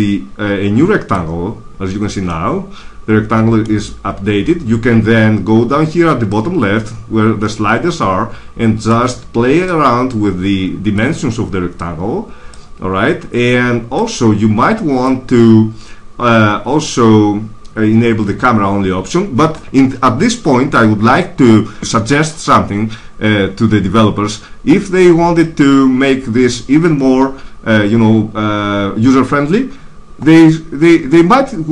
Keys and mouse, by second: 2.2 middle click, 6.2-8.1 drag, 9.5-11.3 drag, 11.3 middle click, 13.5 middle click, 13.9 middle click, 14.1-15.7 drag.